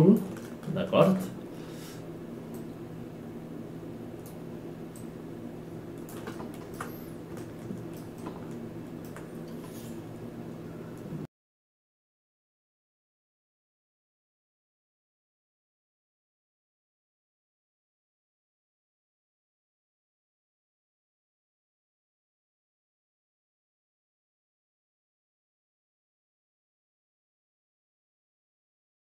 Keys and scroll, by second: 27.3 ctrl+space, 27.7 ctrl+space.